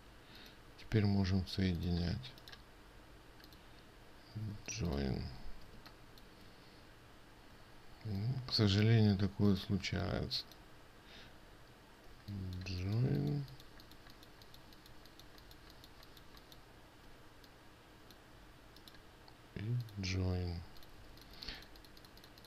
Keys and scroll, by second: 6.3 ctrl+space, 21.5 ctrl+space.